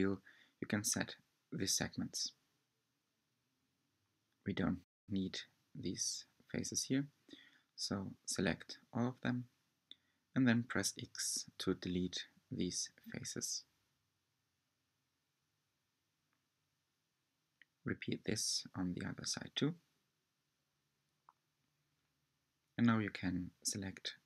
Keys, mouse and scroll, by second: 0.4 scroll down 1, 1.0-1.7 middle drag, 1.3 Tab, 1.5 scroll up 2, 1.8-2.7 shift+middle drag, 2.7 3, 3.0 click, 3.3 shift+click, 4.0 shift+click, 4.2 shift+click, 4.5 shift+click, 4.7 shift+drag, 5.0 shift+drag, 5.5 shift+click, 5.7 shift+click, 6.0 shift+click, 6.3 click, 6.5 click, 6.8-7.1 scroll up 4, 7.1-7.5 shift+middle drag, 7.5 scroll down 2, 8.0 scroll up 1, 8.2-9.0 shift+middle drag, 9.0 shift+click, 9.4 shift+click, 9.7 shift+click, 10.2 shift+middle click, 10.5 shift+scroll down 1, 10.7-11.5 middle drag, 11.5-12.0 scroll down 2, 11.7 middle click, 12.1-14.1 middle drag, 14.1 shift+click, 14.6 shift+click, 15.0 shift+click, 15.6 x, 16.9-18.6 middle drag, 18.6-19.1 scroll down 2, 19.1-19.6 shift+middle drag, 19.6 scroll up 1, 19.7 shift+middle click, 20.1 shift+click, 20.3 shift+click, 20.6 shift+click, 20.7 shift+middle click, 21.0 shift+click, 21.3 shift+click, 21.5 shift+middle click, 21.7 shift+click, 21.8 shift+click, 21.8 shift+click, 22.0 scroll up 1, 22.0 shift+middle click, 22.2 shift+click, 22.4 shift+middle drag, 22.7 shift+click, 22.8 shift+click, 23.0 x, 23.8 2.